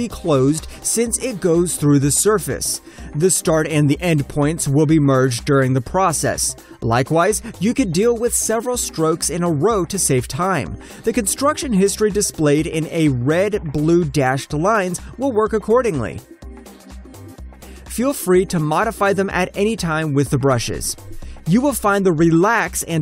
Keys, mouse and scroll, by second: 0.2 alt+click, 2.3 alt+click, 3.8 alt+middle click, 3.9 alt+scroll up 1, 4.4 alt+click, 4.8 alt+middle click, 5.3 alt+click, 7.6 alt+right click, 8.0 alt+click, 8.4 alt+middle click, 8.7 alt+click, 9.0 alt+right click, 9.7 shift+click, 12.1 Return, 12.6 alt+middle click, 14.1-15.0 alt+scroll up 1, 15.0 shift+click, 16.5 Return, 17.0 alt+middle click, 17.2-17.7 alt+scroll up 1, 17.7 shift+middle click, 19.3 shift+middle click.